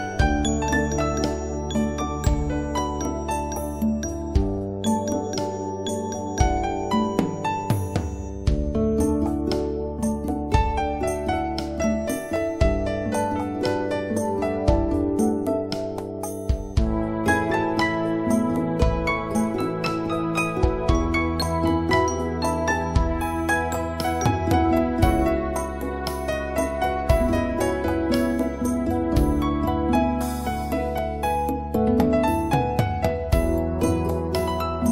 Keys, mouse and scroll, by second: 1.8 scroll up 1, 4.2 scroll down 1, 6.3 click, 10.9 right click, 11.2 click, 12.0 right click, 12.3 click, 14.2-14.5 scroll up 1, 14.5 scroll down 1, 15.7-16.2 scroll up 1, 19.7 click, 20.4 right click, 20.7 click, 24.6 right click, 24.9 click, 25.2 right click, 25.5 click, 30.0 scroll up 1, 32.0 scroll down 1.